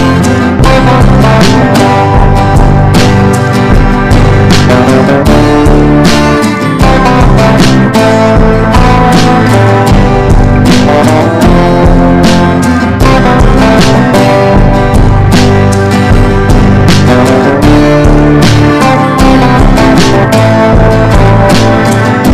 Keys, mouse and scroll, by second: 1.4 shift+click, 7.3 Down, 7.5 Down, 7.5 Down, 9.3-14.1 drag, 15.1 ctrl+g, 16.8 click, 19.1 Down, 19.6 Down.